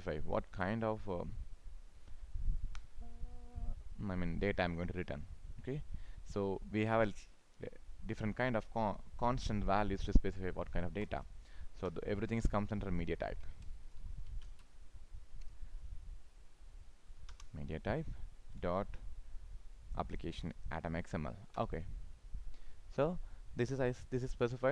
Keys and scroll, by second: 14.3 ctrl+space, 23.6 ctrl+s.